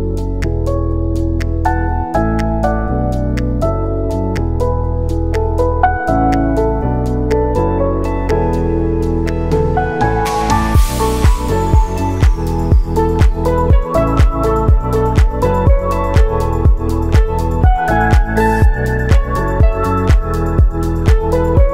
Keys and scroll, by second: 0.4 ctrl+s, 6.2 ctrl+c, 6.4 ctrl+v, 6.9 ctrl+s, 19.6 w.